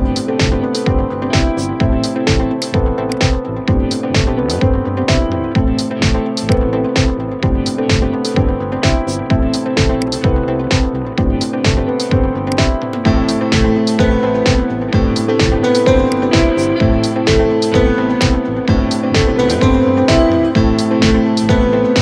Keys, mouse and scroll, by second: 2.3 click, 3.3-4.2 scroll down 2, 4.2 g, 6.7-7.2 shift+middle drag, 7.2 scroll up 3, 7.7-8.9 shift+middle drag, 8.9 g, 12.5-13.8 middle drag, 13.8 KP_7, 15.0 g, 16.9 shift+d, 18.5-22.0 middle drag.